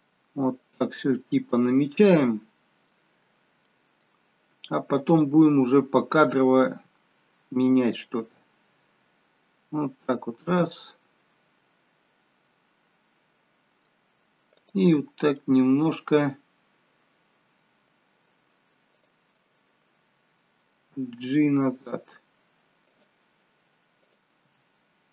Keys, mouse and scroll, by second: 1.4 middle click, 2.9-3.5 scroll down 1, 3.5 middle click, 3.5-4.4 scroll down 1, 5.0 click, 7.8 g, 11.5 middle click, 14.4 click, 15.2-15.9 scroll up 4, 15.9-17.1 scroll down 1, 19.2 shift+click, 20.8 g, 24.4 click, 24.4 g.